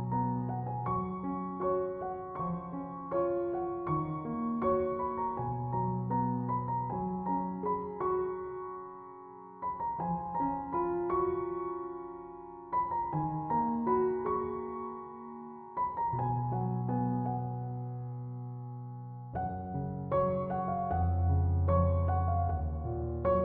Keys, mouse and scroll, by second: 0.5 click, 5.7 click, 8.0 click, 20.4-23.4 drag.